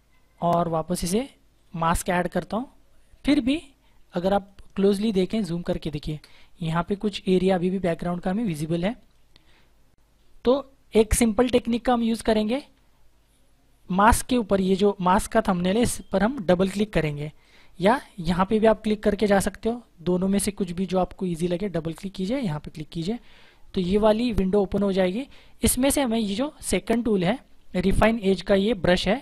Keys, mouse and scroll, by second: 2.5 space, 3.5 click, 3.8 space, 7.4 space, 8.0 click, 8.3 space, 9.2 click, 17.3 click, 21.3 click, 24.5-25.7 scroll up 1.